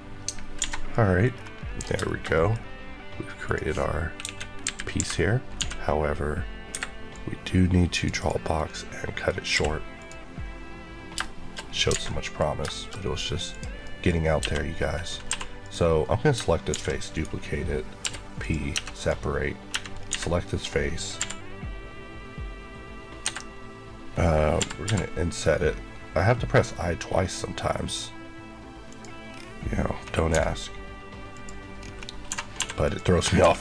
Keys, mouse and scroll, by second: 0.1 alt+click, 0.5 alt+a, 0.8 middle click, 1.2-1.9 scroll down 3, 1.9 shift+middle click, 2.5 scroll up 1, 3.3 click, 4.1 KP_1, 4.9 KP_Decimal, 5.5 d, 6.6 Escape, 7.0 click, 8.1 click, 8.6 middle click, 9.5 q, 9.9 click, 11.0 shift+click, 11.1 shift+middle click, 11.5 scroll, 11.5 scroll down 2, 12.0 middle click, 12.4 scroll down 1, 12.6 middle click, 12.9-13.4 scroll up 1, 13.4 click, 13.7 scroll, 13.7 middle click, 14.0 scroll up 1, 14.6 scroll up 1, 15.2 3, 15.5 click, 16.6 shift+d, 17.0 right click, 17.9 p, 18.3 click, 18.6 Tab, 18.8 click, 19.6 Tab, 19.9 scroll up 1, 20.0 a, 21.1 i, 23.1 Escape, 24.5 i, 28.8 click, 29.2 scroll, 29.3-30.2 scroll down 1, 30.2 x, 31.2 click, 31.7-32.2 scroll up 1, 32.2-33.3 typing, 32.7 click, 33.2 scroll up 1.